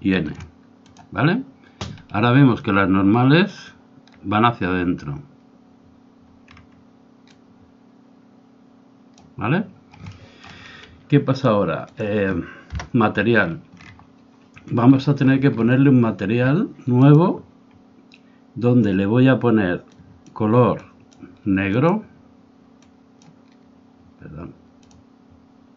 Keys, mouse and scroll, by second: 0.9-2.8 drag, 2.2 ctrl+shift+middle click, 7.3-9.2 drag, 10.1-11.4 middle drag, 12.1 click, 13.4-17.1 middle drag, 17.1-18.8 drag, 19.8 click.